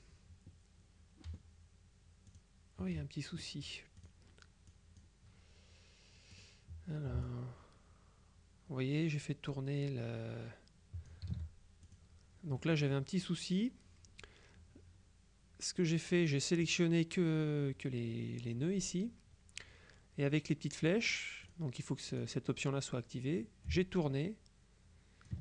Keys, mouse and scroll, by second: 2.4 click, 4.1 click, 4.8 click, 6.4 click, 7.3-11.7 ctrl+drag, 11.3 ctrl+z, 11.9 ctrl+click, 12.7 middle click, 16.2 click, 21.5 click, 22.2 click, 23.7-25.4 ctrl+drag.